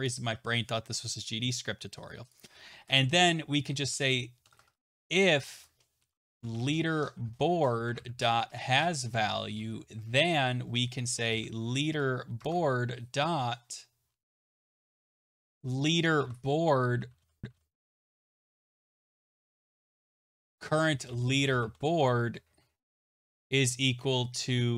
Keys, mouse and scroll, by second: 3.7-5.1 typing.